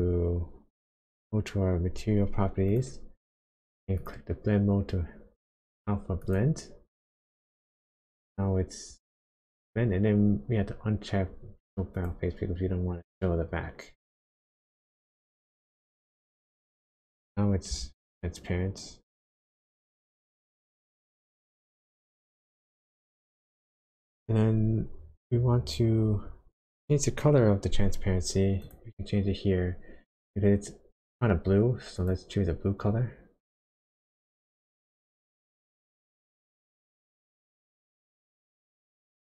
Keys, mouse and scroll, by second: 2.7 click, 3.9 click, 12.1 click, 17.7 g, 19.6 right click, 22.8 click, 24.7-27.9 scroll up 8, 28.6 click, 32.0 click.